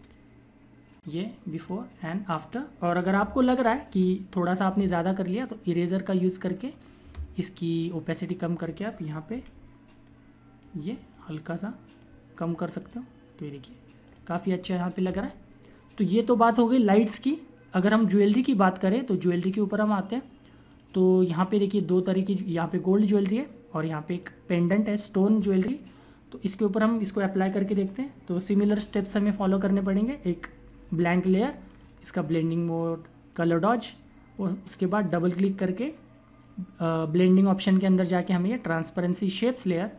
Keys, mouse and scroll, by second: 0.8 click, 3.3 ctrl+=, 5.6 click, 9.2 typing, 9.8 click, 19.2 click, 22.7 click, 29.6 click, 39.6 click.